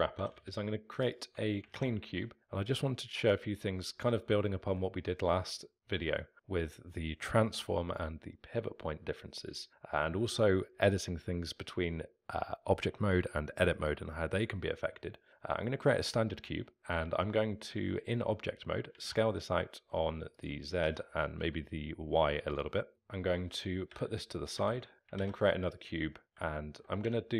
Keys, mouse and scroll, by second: 1.1 x, 3.3 shift+a, 3.9-4.4 scroll down 3, 4.4-5.1 alt+middle drag, 5.1-5.8 scroll up 2, 9.6-16.6 alt+middle drag, 16.6-19.0 scroll down 1, 19.0 s, 20.8 s, 22.9-23.9 alt+middle drag, 23.9 g, 26.3 shift+a, 26.6-27.1 alt+middle drag, 27.1 Tab.